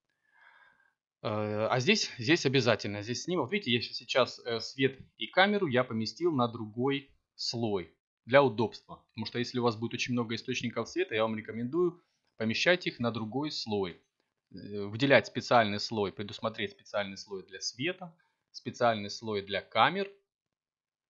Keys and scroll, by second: 4.1 1, 8.4 1, 9.4 5, 11.1 0, 14.4 c, 14.8 m, 16.2 Return.